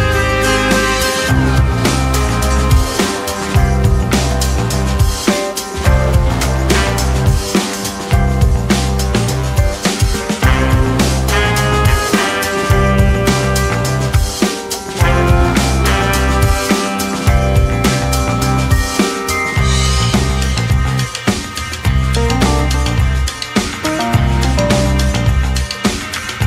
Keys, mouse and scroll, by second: 2.5 ▭, 2.6-3.8 scroll up 2, 2.8-3.8 middle drag, 4.0-6.3 middle drag, 6.3 F12, 7.2-13.3 drag, 18.4 click, 19.5 click, 20.9 click, 21.8-23.9 drag, 23.9 ctrl+d, 24.1 click, 24.6-26.4 drag, 26.3 t.